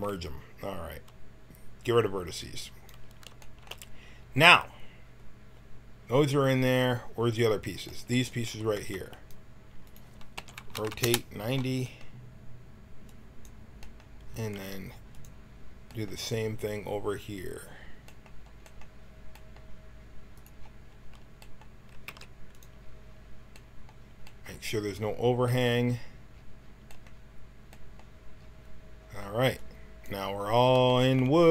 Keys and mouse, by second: 2.5-4.3 middle drag, 8.4 a, 8.7 b, 9.8 click, 10.3 r, 13.0-14.5 drag, 14.5 g, 17.7 middle click, 22.0 s, 29.6-31.5 drag, 29.6-31.5 middle drag, 29.6-31.5 right drag.